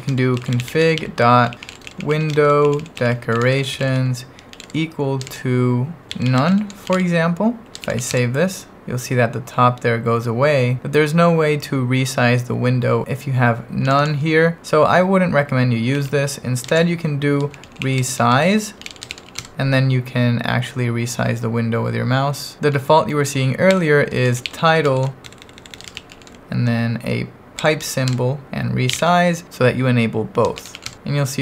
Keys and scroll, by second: 0.0-8.5 typing, 13.8 h, 15.7-19.8 typing, 22.7 h, 23.7-26.6 typing, 27.6-31.2 typing.